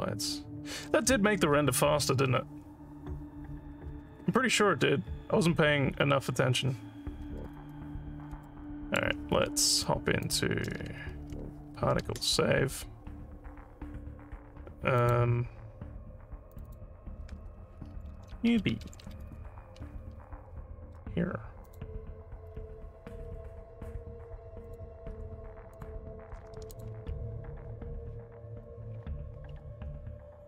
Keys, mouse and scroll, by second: 8.5 alt+middle click, 10.3 click, 12.1 ctrl+s, 15.0 click, 16.6 click, 16.7 click, 18.1-19.6 typing, 21.7 click, 22.5 scroll down 1, 22.6 scroll up 2, 24.7 click, 25.8 click, 26.8 click.